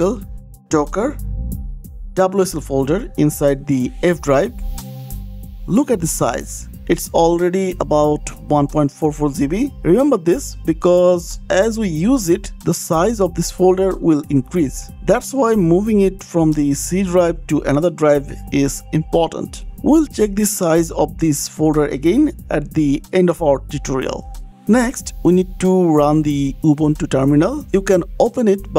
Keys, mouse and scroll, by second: 1.1 click, 1.2 click, 4.4 right click, 6.6 click, 9.5 click, 15.4 click, 16.5 click, 18.6 click, 19.6 click, 20.7 click, 21.3 click, 21.7 click, 22.9 click, 23.9 click, 26.3-26.7 scroll down 5, 26.9 scroll, 28.0 click, 28.0 scroll down 6.